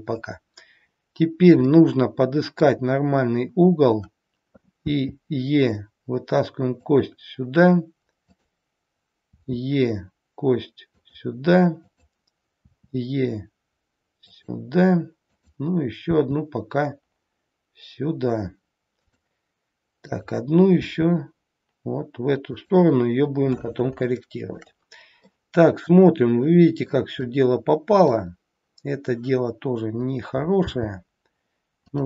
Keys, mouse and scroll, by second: 1.2-1.7 scroll up 2, 1.7 middle click, 3.6-4.3 scroll down 1, 5.0 e, 8.3 click, 9.3 e, 11.8 click, 12.7 e, 15.3 click, 16.2 e, 20.1 click, 20.8 e, 24.1 shift+middle click, 25.3 middle click, 25.3 scroll up 1, 27.1 click, 30.7 g.